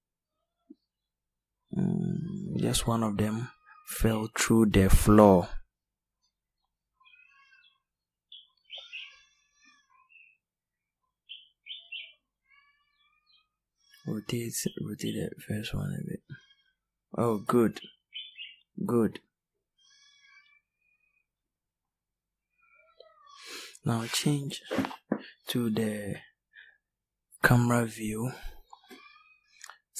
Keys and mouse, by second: 3.1 right click, 6.1 middle click, 9.8 r.